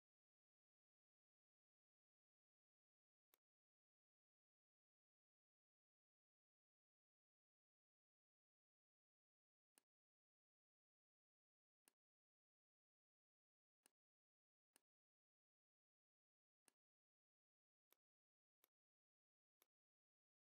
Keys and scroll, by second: 0.9 m, 4.9 KP_1, 5.1 KP_8, 6.3 Tab, 6.6 KP_7, 6.7 KP_0.